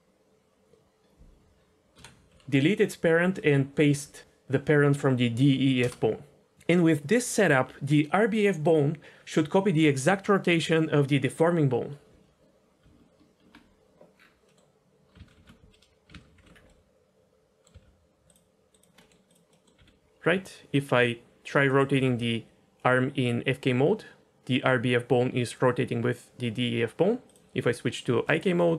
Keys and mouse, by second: 1.0-5.8 drag, 12.7 Tab, 14.4 middle click, 15.3 alt+h, 16.3 alt+h, 16.7-17.6 middle drag, 19.0 middle drag, 19.2 click, 19.5 middle click, 19.8 r, 21.9 r, 22.1 r, 28.0 click.